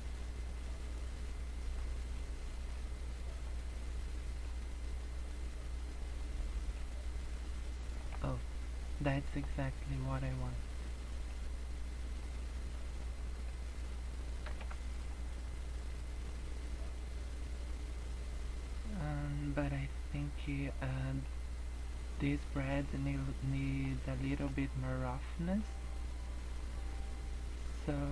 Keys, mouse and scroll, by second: 0.2 click, 2.8 click, 4.5 click, 6.8 click, 8.2 scroll down 3, 9.1 middle click, 9.5 scroll up 2, 11.4 click, 13.1 middle click, 13.9 scroll down 5, 14.5 KP_0, 15.1-15.6 scroll down 3, 16.0-16.3 scroll up 2, 17.0 scroll up 2, 18.9 scroll down 3, 19.3 middle click, 20.9 middle click, 21.7 scroll up 2, 22.8 middle click, 24.2 middle click, 24.5-25.0 scroll up 6, 25.6 click, 28.0 middle click.